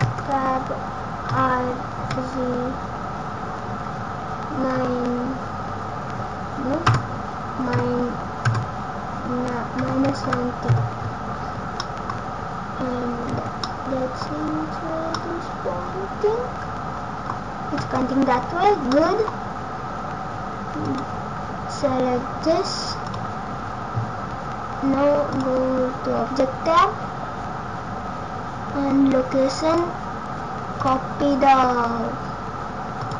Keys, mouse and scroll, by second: 1.2 r, 11.8 middle click, 12.1-12.6 scroll down 1, 13.3 Tab, 13.6 middle click, 14.3 scroll up 1, 15.1 middle click, 17.7 Tab, 18.1-18.6 scroll down 1, 18.8 middle click, 20.8 click, 23.0 click, 25.3 click, 29.6 click, 32.9 click.